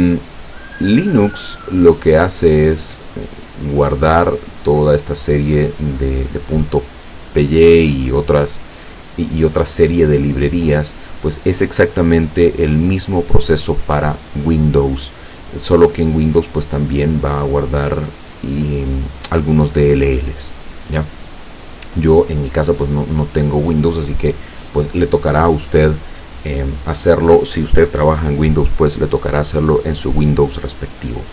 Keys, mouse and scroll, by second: 1.7 click, 2.6 click, 3.3 click, 4.1 click, 5.1 scroll down 1, 5.7-6.0 scroll down 1, 6.3 scroll down 2, 7.1-7.8 scroll up 4, 8.6 click, 10.7 click, 17.5 scroll down 2, 19.0-19.3 scroll down 2, 19.5-20.3 scroll down 4, 20.7 scroll down 2, 20.9 scroll up 2, 21.0-21.6 scroll down 2, 22.6 click.